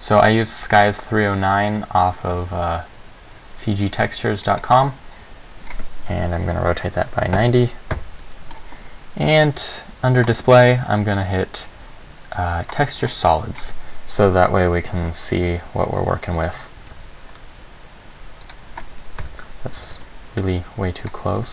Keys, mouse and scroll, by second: 4.8 click, 6.4 r, 8.1 KP_1, 10.4 click, 12.8 click, 15.5 g, 16.6 click, 17.0 g, 18.7 click, 19.4 KP_7, 19.9 g, 21.2 click, 21.4 g.